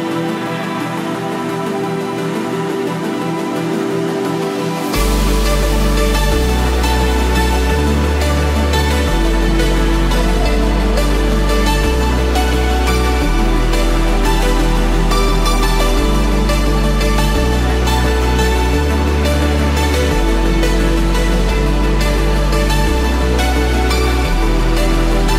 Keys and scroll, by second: 24.4 ctrl+=.